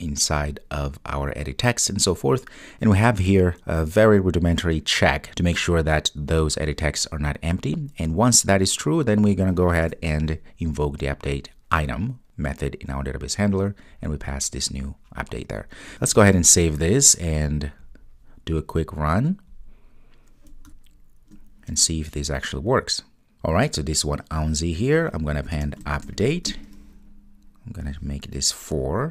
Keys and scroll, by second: 17.2 super+s, 18.8 ctrl+r.